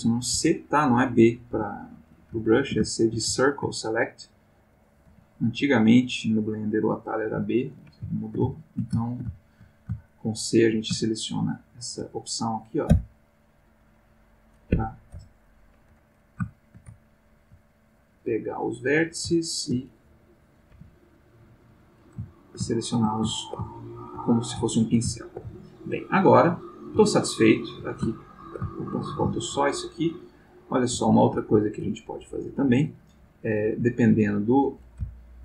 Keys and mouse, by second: 0.3 space, 1.2 click, 1.4 g, 2.1 ctrl+click, 2.5 ctrl+middle click, 3.5 ctrl+shift+middle click, 4.1 click, 5.1 g, 5.6 click, 6.9 click, 7.3 g, 7.7 click, 8.1 ctrl+middle click, 9.1 ctrl+shift+middle click, 10.1 shift+middle click, 11.0 shift+middle click, 11.6 shift+middle click, 12.8 c, 13.3-14.6 drag, 14.7 Escape, 15.1 x, 15.4 click, 16.5-18.1 shift+middle drag, 18.8 click, 19.3-19.8 ctrl+middle drag, 20.5 click, 20.8 g, 21.8 click, 22.3 ctrl+shift+middle click, 23.3-24.3 ctrl+shift+middle drag, 24.6 shift+middle click, 26.4 click, 27.1-27.9 ctrl+middle drag, 28.1-29.8 ctrl+middle drag, 30.2 click, 31.1 shift+middle click, 33.2 g, 34.6 ctrl+click, 35.1 ctrl+middle click.